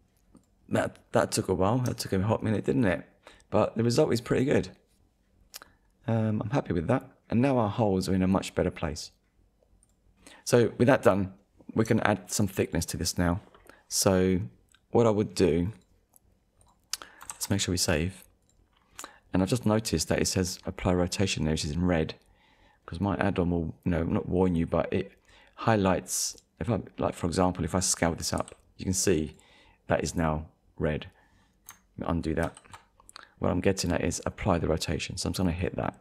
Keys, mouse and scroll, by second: 0.4 click, 1.1 scroll up 1, 1.6-1.9 scroll down 2, 2.1 shift+middle click, 5.2 scroll up 1, 5.9 scroll up 1, 6.4 scroll down 1, 7.1 scroll down 1, 9.8 scroll up 1, 9.8 click, 10.1 scroll down 1, 10.6 middle click, 11.8 Tab, 12.6 click, 13.4 middle click, 15.7 click, 16.6 click, 17.3 ctrl+s, 18.4 click, 24.4 click, 26.3 click, 28.4 s, 29.3 click, 32.4 ctrl+z, 33.0 click, 34.1 click, 35.6 click.